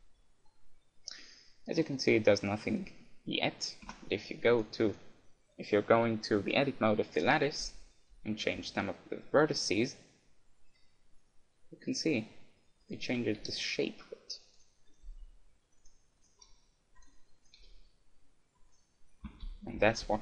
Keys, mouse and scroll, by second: 1.2 middle click, 2.0-3.8 right drag, 4.0 Tab, 4.6-6.6 right drag, 7.2-9.2 right drag, 9.4 g, 13.0-14.6 right drag, 13.4 g, 14.6 click, 15.2 g, 16.4 click, 16.4 g, 17.6 g, 19.3 ctrl+z, 19.3-20.2 drag, 19.5-20.2 ctrl+z.